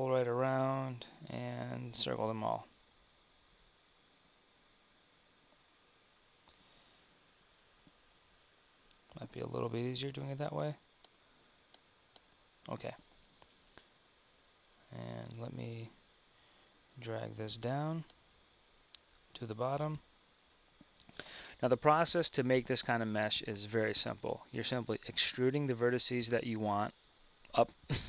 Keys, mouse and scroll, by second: 13.0 KP_1, 13.9 middle click, 14.3 Tab, 18.9-28.0 drag.